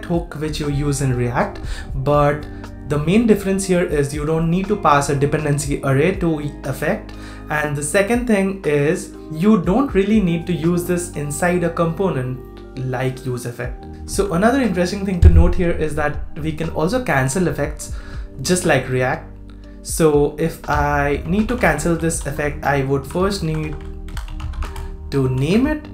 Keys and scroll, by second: 13.9 super+z, 25.4 super+v.